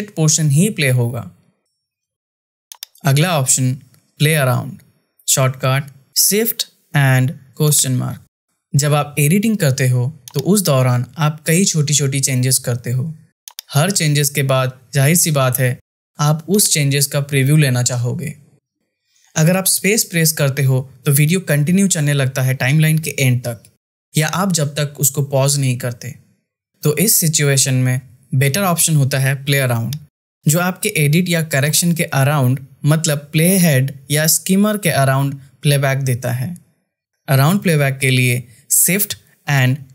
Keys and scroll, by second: 19.3 space, 25.9 space, 38.6 shift+/.